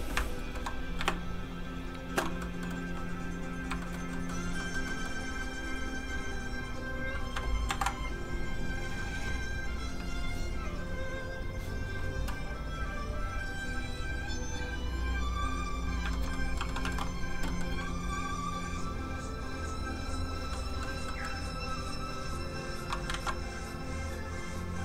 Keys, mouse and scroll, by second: 0.1 shift+m, 0.2 shift+middle click, 0.4 shift+middle click, 1.1 shift+space, 2.4 space, 2.5 middle click, 2.8 f, 3.5 click, 3.8 shift+middle click, 4.0 scroll down 1, 4.1 middle click, 6.1 click, 7.7 alt+m, 8.4 click, 16.1 shift+middle click, 16.3 middle click, 16.4 middle click, 16.8 alt+shift+middle click, 18.3 alt+shift+click, 18.4 click, 20.5 middle click, 22.0 click, 23.1 ctrl+z, 23.8 click, 23.9 click.